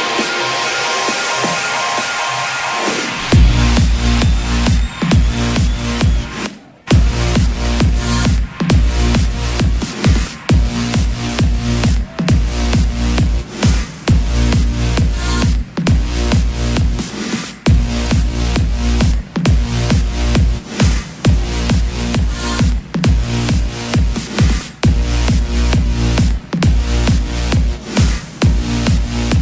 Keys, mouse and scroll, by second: 10.1 KP_1, 11.3 KP_0, 17.1-29.4 drag.